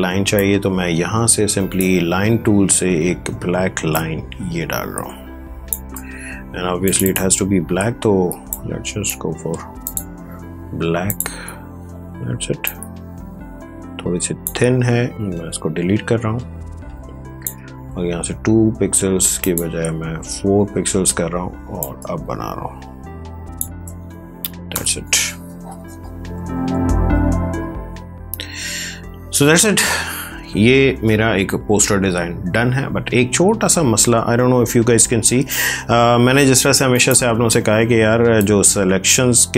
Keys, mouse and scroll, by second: 0.3-3.9 drag, 3.9-9.8 drag, 12.1 space, 12.6 ctrl+click, 15.1-19.3 drag, 19.8-21.5 scroll up 1, 21.7-39.5 drag.